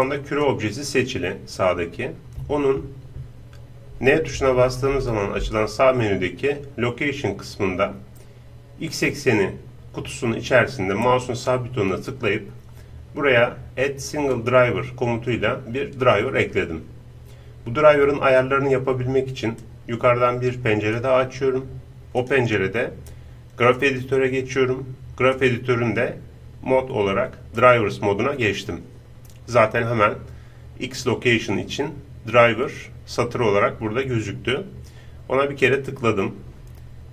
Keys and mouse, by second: 1.1 click, 4.5-6.4 middle drag, 4.5 n, 4.9 n, 11.0-19.2 right drag, 19.6-21.1 drag, 22.1-23.8 drag, 25.3-27.0 drag, 35.6-37.1 drag.